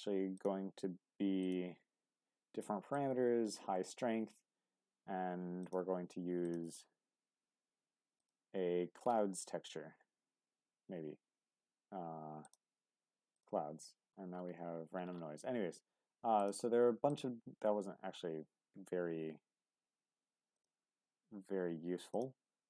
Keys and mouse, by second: 0.5-20.6 drag, 22.1 click.